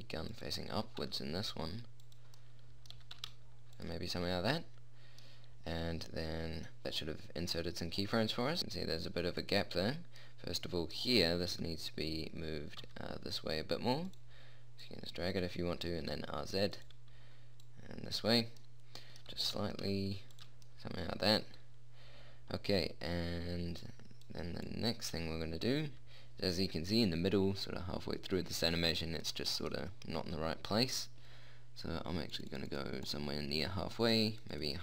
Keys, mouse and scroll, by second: 1.1 g, 2.7 middle click, 3.3 g, 4.5 middle click, 6.8-8.5 middle drag, 8.7-10.6 middle drag, 11.9 g, 15.1-17.1 drag, 16.3 r, 17.9 click, 19.7 g, 26.7-29.6 middle drag.